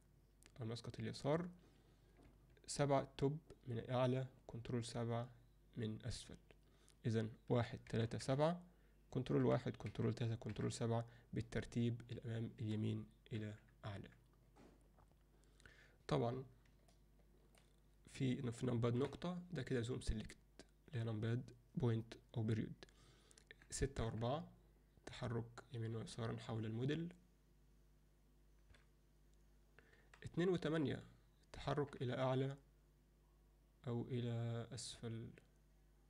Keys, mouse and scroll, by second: 2.3 KP_7, 4.6 ctrl+KP_7, 7.6 KP_1, 7.9 KP_3, 8.2 KP_7, 9.4 ctrl+KP_1, 9.9 ctrl+KP_3, 10.8 ctrl+KP_7, 13.4 KP_1, 16.9-17.6 alt+middle drag, 19.0 KP_Decimal, 23.8-36.0 typing.